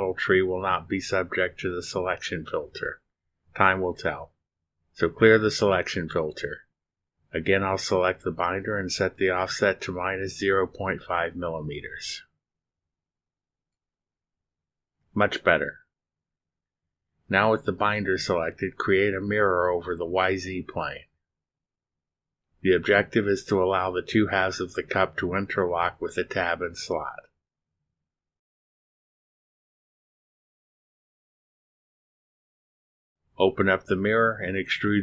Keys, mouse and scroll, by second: 8.1 click, 9.6 click, 11.2 click, 12.7 scroll down 1, 13.6-14.0 scroll down 3, 15.1 click, 15.5 click, 16.2-17.4 typing, 19.9 click, 20.4 click, 23.5 click, 27.0 click, 28.6 click, 31.0 click, 33.0 click, 34.8 click.